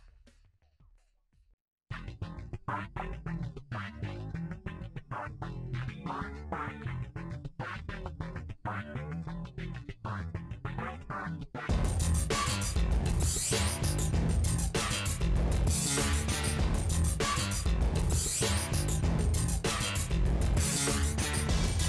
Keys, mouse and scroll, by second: 0.3 click, 0.7 middle click, 1.0 ctrl+click, 1.6 middle click, 1.8 ctrl+click, 2.0 middle click, 2.5 ctrl+click, 2.6 middle click, 3.3-4.4 drag, 4.4 middle click, 5.0 ctrl+z, 5.9 click, 6.8 ctrl+z, 7.1-8.4 drag, 8.4 middle click, 9.0 ctrl+z, 9.5-11.9 drag, 12.5 click, 13.0-15.8 middle drag, 16.0 ctrl+s, 18.2 click, 18.5 middle click, 19.0 scroll down 4, 19.2-20.6 middle drag, 20.6 KP_7, 21.2 r.